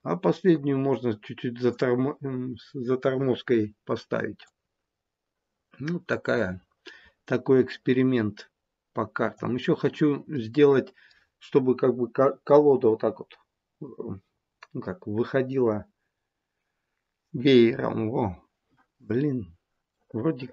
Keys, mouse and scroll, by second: 4.5 click, 9.7-10.1 scroll down 2, 10.2 middle click, 10.6 middle click, 19.9 middle click.